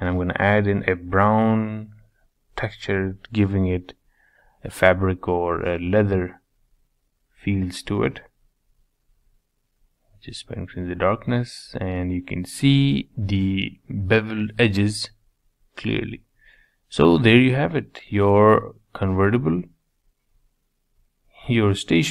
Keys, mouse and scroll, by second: 0.7-1.5 scroll up 2, 1.5-5.7 drag, 7.1 click, 11.9 scroll down 2, 12.2 middle click, 13.1 scroll down 2, 13.4 middle click, 14.3-14.6 scroll up 3, 14.6 middle click, 15.2 scroll up 2, 15.6-18.0 middle drag, 18.0-18.4 drag, 18.4-19.1 scroll down 6, 19.1-20.5 shift+middle drag, 20.5-21.0 scroll up 4, 21.0-22.1 shift+middle drag.